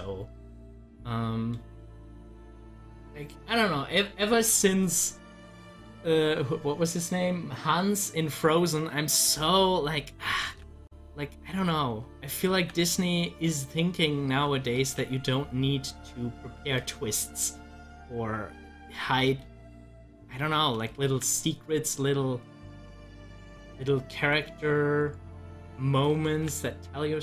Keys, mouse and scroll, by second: 0.5-4.0 middle drag, 9.1-10.4 drag, 10.4 ctrl+z, 13.5-14.8 drag, 14.8 ctrl+z, 20.9 ctrl+z, 21.9-25.2 drag, 25.4 click.